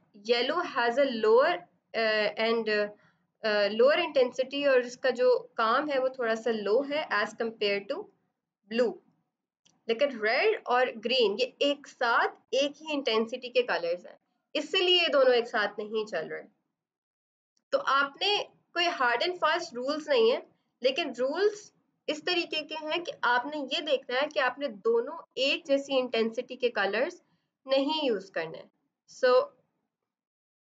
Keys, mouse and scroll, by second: 29.1 right click, 29.8 click.